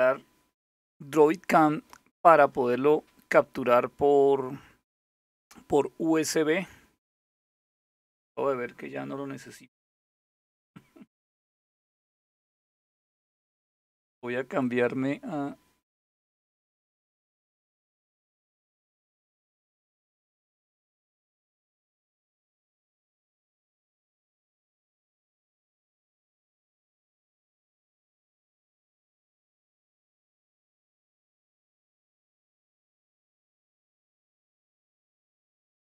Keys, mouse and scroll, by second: 20.9 click, 23.2 click, 23.8 click, 27.6 click, 32.6 click, 33.3 click.